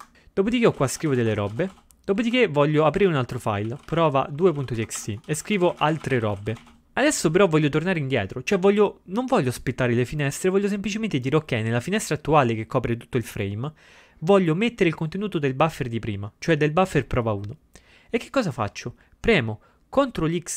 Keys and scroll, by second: 0.0-2.2 typing, 5.1 typing, 7.2-7.9 typing.